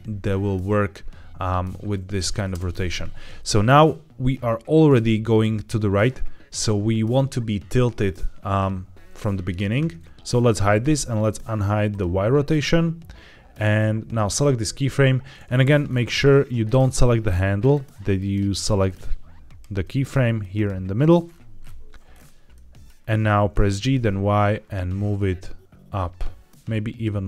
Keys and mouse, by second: 2.4 space, 3.3-6.5 drag, 11.8 click, 14.0 click, 15.3 Escape, 15.3 g, 16.2 middle click, 17.5 click, 18.0 click, 18.4 click, 19.7 click, 19.9 click, 20.3-20.6 drag, 22.5 middle click, 23.5 g, 23.7 y.